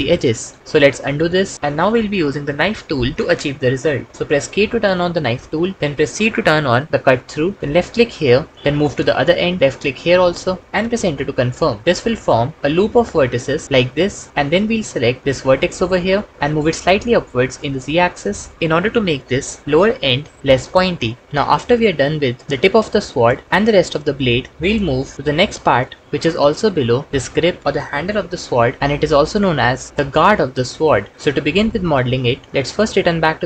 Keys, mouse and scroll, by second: 0.8 ctrl+z, 1.2 ctrl+z, 5.3 k, 5.7 c, 11.2 Return, 14.3 KP_1, 16.3 g, 16.5 z, 33.3 Tab.